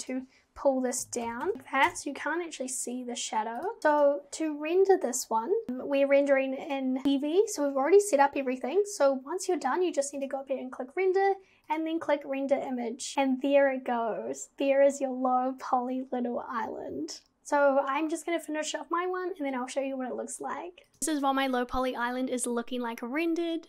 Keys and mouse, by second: 0.0 click, 1.0 g, 1.5 g, 1.9 KP_0, 3.6 click, 6.7 click, 10.2-11.8 drag.